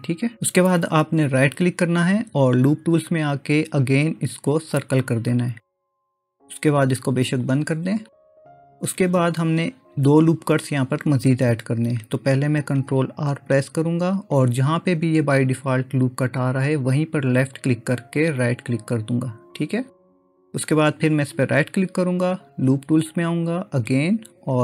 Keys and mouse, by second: 1.3-4.9 right drag, 7.5 click, 13.4 ctrl+r, 21.4-24.6 right drag.